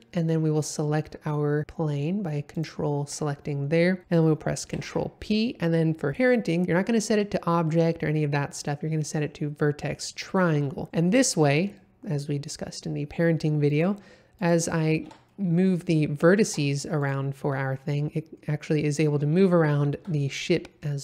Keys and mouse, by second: 4.7 ctrl+p, 11.5 middle drag, 12.2 middle click, 13.7 click, 15.0 Tab, 15.3 middle click, 16.4 1, 17.4 g, 20.0 Escape, 20.3 middle click.